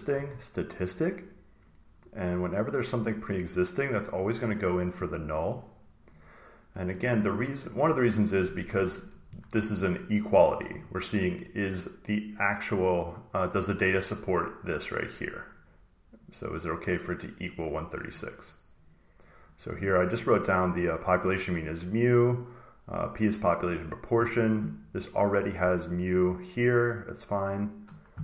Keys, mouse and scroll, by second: 4.2 click, 6.1 click, 7.7 click, 11.0 click, 13.3 click, 15.5 click, 16.7 click, 17.0 click, 17.5 click, 18.7 click, 19.3 click, 20.8 click, 22.9 click, 25.9 click, 26.2 click, 26.6 click, 27.3 click.